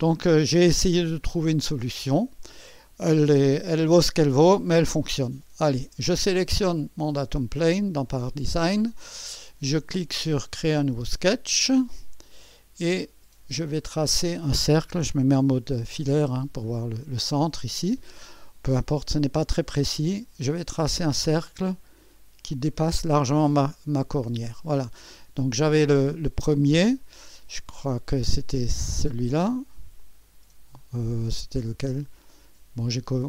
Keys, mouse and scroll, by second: 6.1-7.2 drag, 10.9-12.1 drag, 12.4-13.4 scroll up 1, 12.8-14.0 middle drag, 14.0-14.8 scroll up 3, 14.5 middle click, 14.8 click, 15.7 2, 19.1 click, 21.1 click, 22.2 click, 24.0-25.1 drag, 30.0-31.0 drag, 31.9 click.